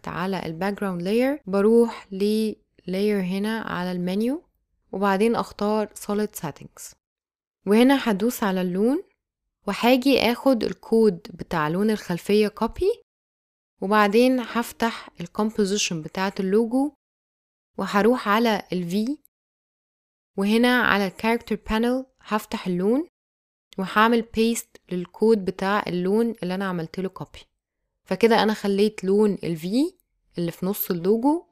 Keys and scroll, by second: 12.1 super+c, 24.4 super+v.